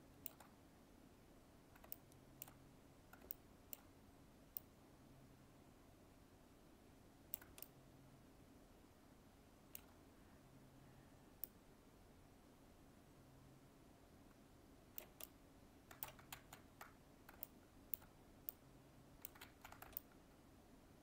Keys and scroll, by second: 16.3 ctrl+z, 19.4 ctrl+z.